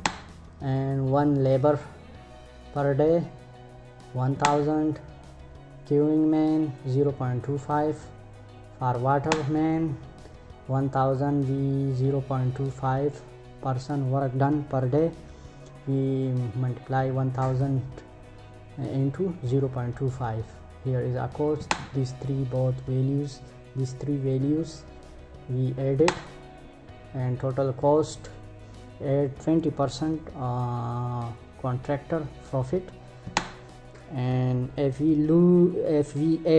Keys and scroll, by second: 3.9 Return, 8.8 Return, 21.1 Return, 25.5 Return, 32.8 Return.